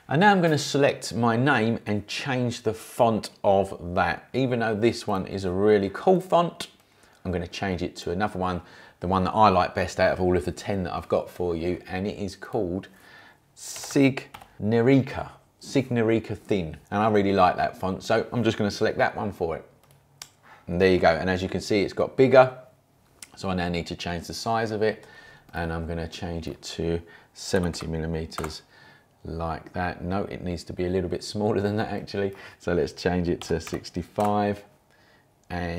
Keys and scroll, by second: 13.5-14.8 typing, 27.3-28.2 typing, 28.4 Return, 33.2-34.1 typing, 34.2 Return.